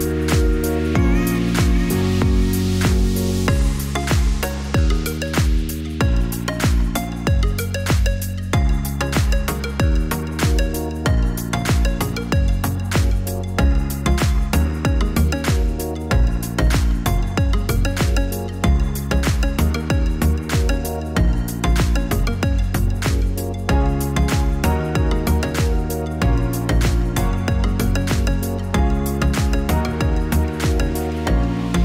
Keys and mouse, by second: 3.9-9.2 drag, 12.9 click, 21.0-25.6 drag.